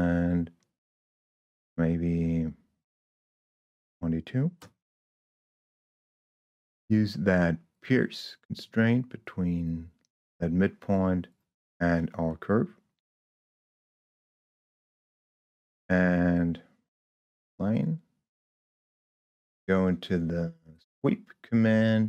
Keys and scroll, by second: 4.0 2, 4.5 Return.